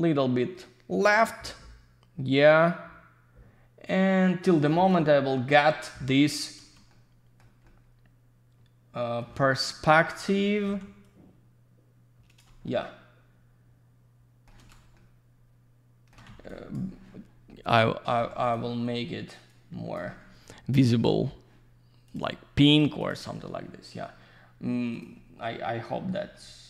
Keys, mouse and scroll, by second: 6.9 shift+middle click, 7.6 shift+middle click, 10.4 middle click, 11.0 click, 12.6 shift+middle click, 14.9 shift+middle click, 16.5 click, 18.2 q, 18.4 click, 19.5 click, 20.9 click, 22.0 click, 22.7 click, 23.0 click, 23.1 double click, 24.9 click, 26.3 shift+middle click.